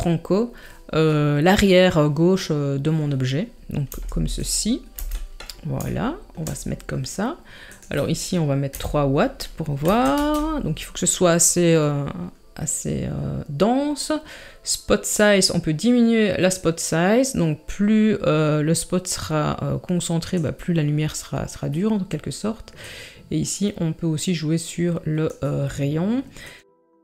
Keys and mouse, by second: 3.9 g, 5.0 n, 6.0-6.4 shift+middle drag, 7.8-10.2 drag, 15.1-20.3 drag, 22.9-25.5 drag, 26.5 click.